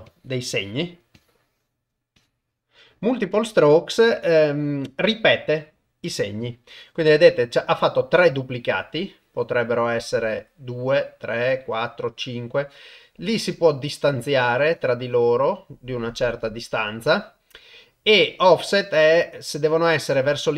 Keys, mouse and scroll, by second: 0.1 click, 0.5 click, 1.2 click, 2.2 click, 3.3 click, 8.9-13.0 shift+drag, 13.7-17.7 shift+drag, 18.4-20.5 drag.